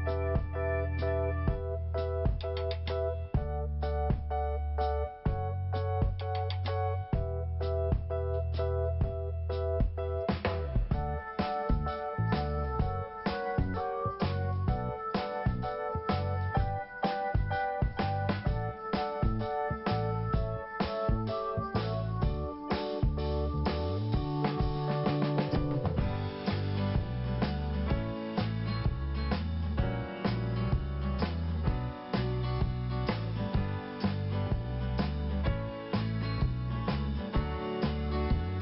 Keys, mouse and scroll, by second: 0.4 click, 1.0 click, 2.7 click, 3.0 double click, 4.5 click, 8.1 click, 8.2 click, 8.5 click, 8.6 double click, 9.1 scroll down 1, 10.4 scroll up 1, 10.4 5, 12.6 click, 12.7 click, 13.5 click, 13.6 click, 13.9 scroll down 1, 14.6 scroll up 1, 15.9 scroll down 1, 22.2 click, 22.3 click, 24.3 right click, 25.4-26.2 scroll down 1, 26.3 scroll up 1, 27.3 scroll down 1, 28.8 scroll up 1, 30.3 scroll down 1, 31.8 scroll up 1, 33.0 click, 33.9 right click, 35.0 click, 35.7 click, 35.8 click, 36.0 click, 36.1 click, 37.6 click, 37.7 click.